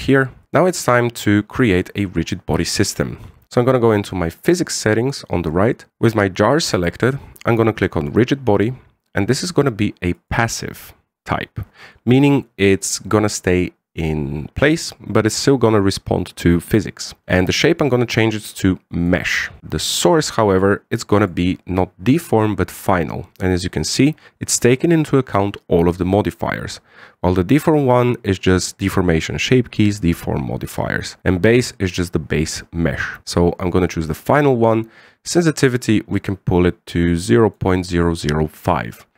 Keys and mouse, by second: 1.0-1.7 middle drag, 3.7 click, 8.7 click, 10.1-11.0 drag, 18.5-19.6 drag, 21.3 click, 21.9-34.0 drag, 36.1-38.4 drag.